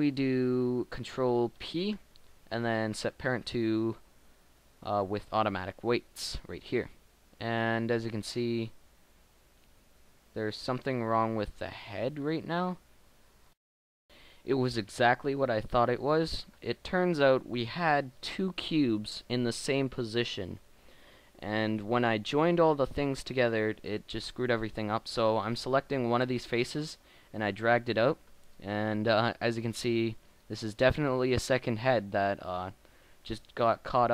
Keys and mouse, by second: 1.5 ctrl+p, 9.2 middle click, 15.9-17.2 middle drag, 21.0 middle click, 21.6 middle click, 24.3 g, 27.4 click, 27.7 click.